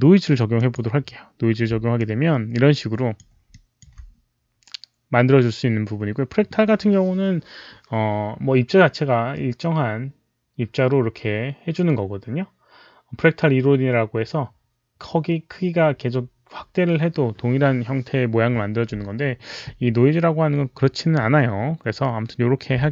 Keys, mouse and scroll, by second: 0.4 click, 1.8-3.0 alt+drag, 3.4 alt+click, 22.8 alt+click.